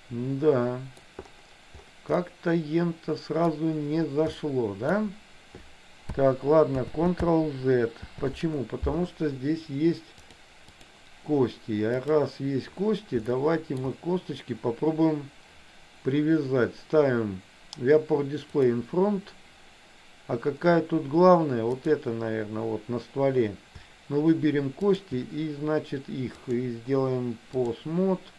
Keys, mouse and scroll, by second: 2.3-3.5 middle drag, 4.4 shift+middle click, 7.0 ctrl+z, 8.2 ctrl+z, 10.4 click, 12.1 click, 13.5 shift+middle click, 21.8 click, 24.9 shift+click, 26.4-27.8 drag.